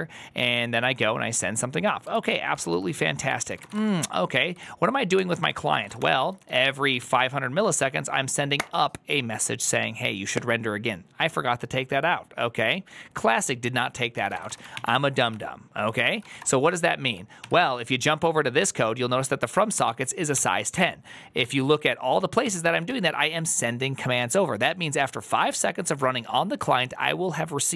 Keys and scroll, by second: 1.8-4.0 typing, 4.4 ctrl+s, 5.0 ctrl+h, 5.3-7.0 typing, 14.4-16.7 typing, 15.2 ctrl+t, 17.3 ctrl+s, 19.6-21.3 typing, 20.2 ctrl+c, 22.3 typing.